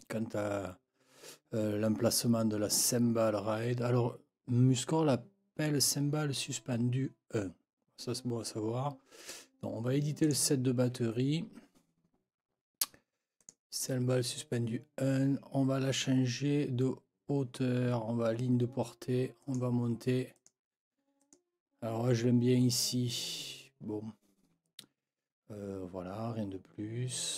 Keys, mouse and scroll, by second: 10.2 click, 13.4 click, 19.4 click, 20.4 click, 21.2 click.